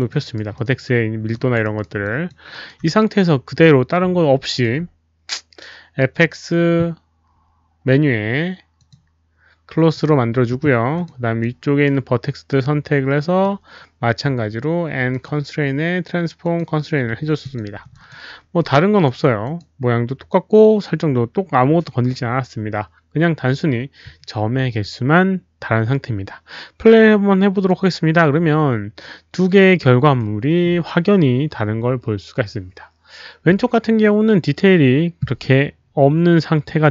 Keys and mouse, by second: 0.1 alt+right click, 0.5 alt+middle click, 0.6 alt+click, 1.3 alt+click, 1.5 alt+middle click, 1.6 alt+right click, 2.0 alt+click, 2.5 alt+right click, 2.5 alt+middle click, 4.3 alt+shift+d, 4.3 alt+right click, 4.3 alt+click, 4.3 alt+middle click, 8.7 alt+shift+d, 8.7 alt+click, 8.7 alt+right click, 8.7 alt+middle click, 9.9 click, 10.8 alt+shift+d, 10.8 alt+middle click, 10.9 alt+click, 11.3 alt+shift+d, 11.3 alt+right click, 11.3 alt+middle click, 12.6 alt+click, 13.4 alt+shift+d, 13.4 right click, 15.1 click, 16.4 click, 16.4 right click, 17.4 click, 17.9 alt+click, 18.6 alt+click, 19.4 click, 19.5 right click, 20.7 alt+click, 20.7 right click, 23.4 alt+click, 25.9 alt+click, 27.5 alt+click, 28.2 alt+click, 30.2 click.